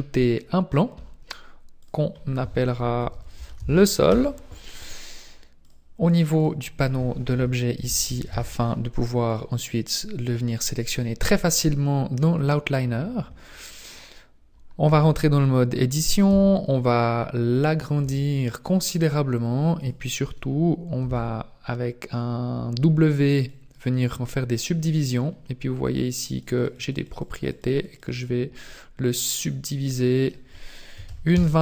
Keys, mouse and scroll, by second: 1.8 click, 5.6 click, 6.4 click, 12.5-13.8 scroll down 1, 13.8-14.9 scroll down 1, 14.9 Tab, 16.3 s, 18.0 s, 21.1 w, 26.4-28.1 click, 26.5 click, 26.9 click, 27.3 click, 27.5 click, 30.2 click.